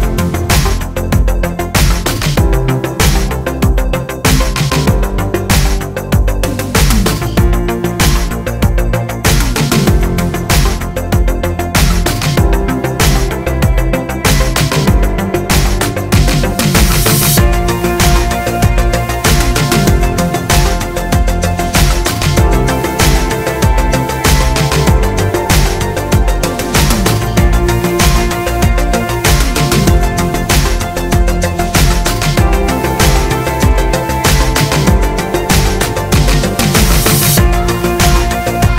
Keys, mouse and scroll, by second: 3.2-7.3 middle drag, 7.3 click, 7.6-11.0 middle drag, 7.9 Tab, 10.4 Tab, 11.0 click, 11.3-38.7 middle drag.